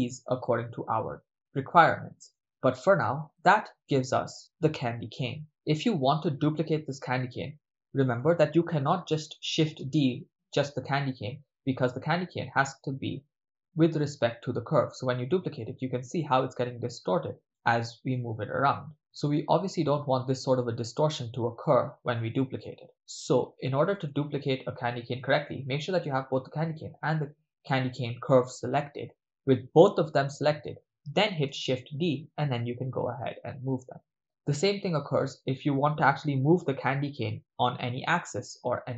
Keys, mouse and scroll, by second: 0.0-2.3 middle drag, 2.6-3.7 ctrl+middle drag, 4.2-5.8 ctrl+middle drag, 11.5 shift+d, 18.9 click, 19.3-20.5 ctrl+middle drag, 20.6-22.6 middle drag, 22.9 x, 24.0 right click, 26.9 ctrl+click.